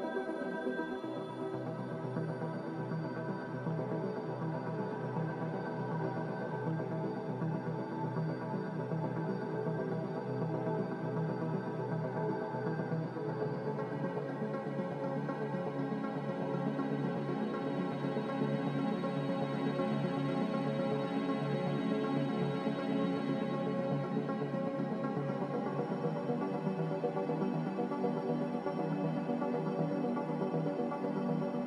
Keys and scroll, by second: 1.1 ctrl+k, 16.2 s, 17.6-18.8 typing, 19.1 Return, 22.6 a, 22.6 f, 26.6 f.